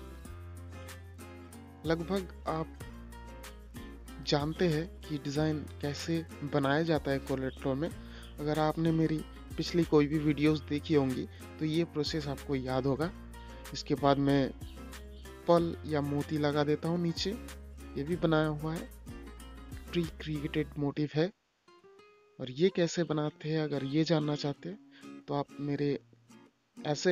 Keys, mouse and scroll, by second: 1.3 click, 3.4 shift+click, 6.0 ctrl+g, 8.7 click, 10.8-11.6 scroll down 1, 12.4 click, 13.7 scroll up 1, 15.0-18.4 drag, 19.8 ctrl+g, 20.5 click, 24.5 ctrl+g, 25.2 v.